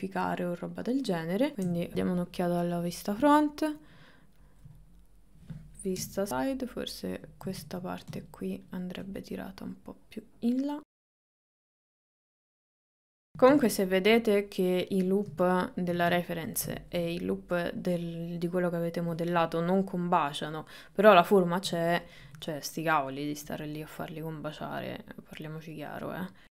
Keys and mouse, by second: 0.8 click, 1.2 middle click, 1.7 KP_1, 3.8 click, 4.4 ctrl+middle click, 4.8 middle click, 6.0 KP_3, 6.3 click, 7.6 ctrl+z, 9.4-11.2 drag, 11.2 shift+middle click, 11.6 click, 11.9 shift+middle click, 12.2 click, 12.6 shift+middle click, 13.0 click, 13.4 ctrl+middle click, 15.6 ctrl+middle click, 16.2 shift+middle click, 16.8 ctrl+middle click, 24.7 click, 25.5 click.